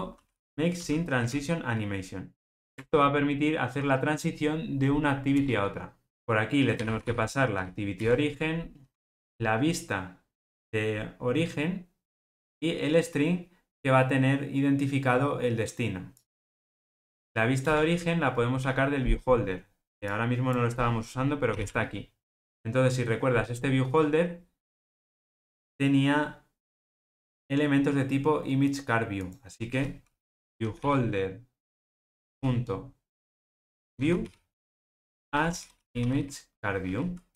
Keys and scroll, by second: 8.0 Return, 34.6 Return.